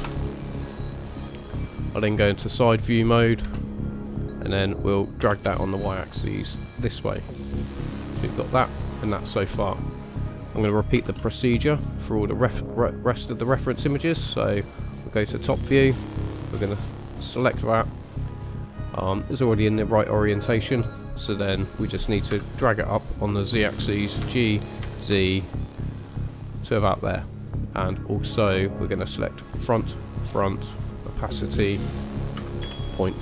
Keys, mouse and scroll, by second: 3.4 KP_3, 4.5-5.2 scroll up 1, 5.2 g, 7.4 middle click, 10.1 middle click, 11.0 shift+a, 19.3 middle click, 22.3 KP_1, 24.2 g, 27.2 middle click, 29.6 click, 30.2 click, 31.0 click, 31.7 click.